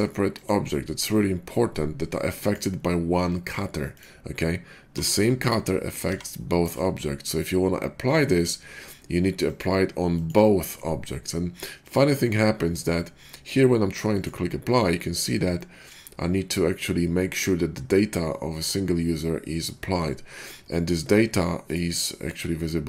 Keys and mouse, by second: 0.4-9.3 middle drag, 4.8 g, 6.0 g, 9.3-21.7 drag, 21.7-22.8 middle drag.